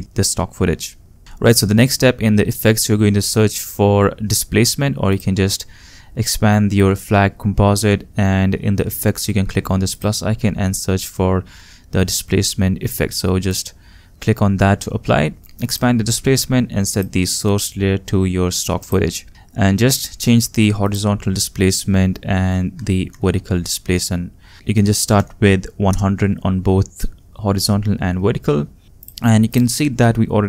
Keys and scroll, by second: 22.7 1, 23.0 0, 24.7 1, 25.0 0, 25.9 Return.